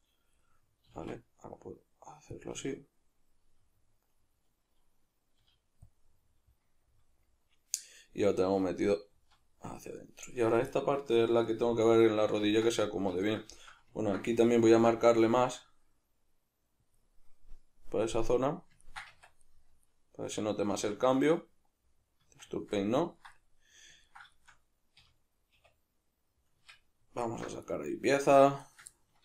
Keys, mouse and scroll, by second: 0.4-2.5 middle drag, 0.9 s, 2.5 click, 2.5-5.9 middle drag, 5.4 g, 5.9 click, 6.1-10.3 middle drag, 8.8 a, 9.1 z, 10.3 right click, 10.7 middle click, 11.5 right click, 11.9-16.9 middle drag, 14.7 ctrl+r, 16.9 click, 18.2-28.7 middle drag, 19.1 Tab, 20.7 Tab, 25.0 \, 26.6 Tab, 27.2 alt+h, 28.7 right click, 28.9-29.2 ctrl+middle drag.